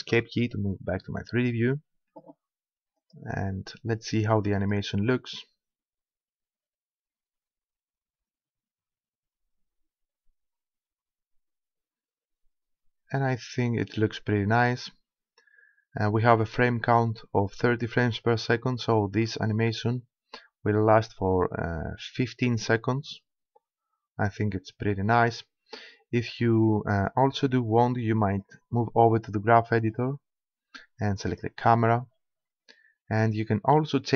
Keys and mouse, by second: 0.0 Escape, 3.0-6.5 drag, 6.3 middle click, 25.2-28.3 drag, 29.9 click, 31.3-33.1 right drag, 33.1-34.1 middle drag.